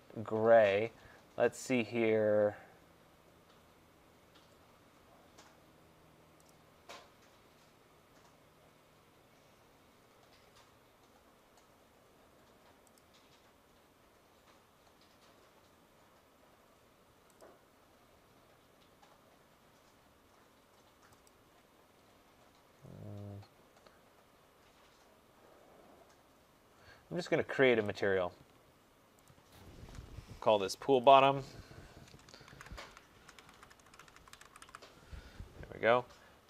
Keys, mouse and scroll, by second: 2.3-2.9 scroll, 2.9-3.8 scroll, 4.2-4.9 scroll, 6.5 click, 8.9 scroll, 10.0-11.3 scroll, 11.3 scroll, 11.6 middle click, 12.1 middle click, 13.0 click, 15.3 middle click, 16.0 middle click, 17.5 click, 21.3 click, 22.8-23.7 scroll, 23.7 scroll, 24.3-25.2 scroll, 27.3-28.0 scroll, 28.1 click, 29.3 click, 31.1 click, 31.3 click, 32.6 ctrl+a, 33.2-34.7 typing.